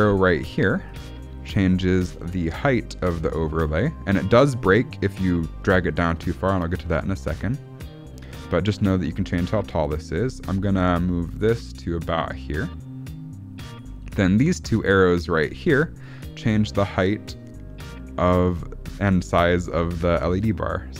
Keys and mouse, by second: 0.9 drag, 1.8-13.7 drag, 15.9-20.9 drag.